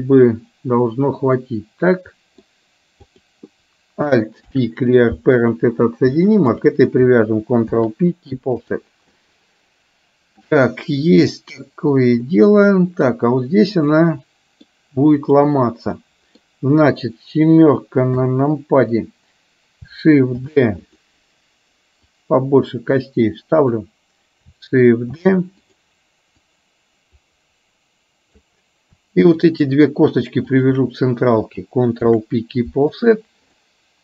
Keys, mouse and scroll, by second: 1.4-2.4 middle drag, 3.2 click, 4.4 alt+p, 8.3 ctrl+p, 9.2-10.6 middle drag, 12.4 middle click, 14.1 middle click, 15.2 click, 15.9 middle click, 18.2 KP_7, 20.6 shift+d, 22.1-24.3 drag, 25.2 shift+d, 26.4-28.4 drag, 29.4 shift+click, 30.6 shift+click, 32.1 ctrl+p, 33.6-34.0 middle drag.